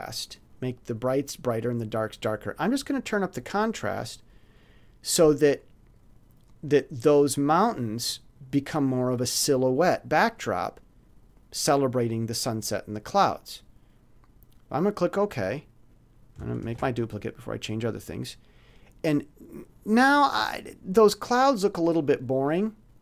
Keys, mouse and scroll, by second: 3.5-3.8 scroll up 1, 14.7 scroll up 2, 14.8 click, 15.9 click, 16.6 ctrl+shift+d.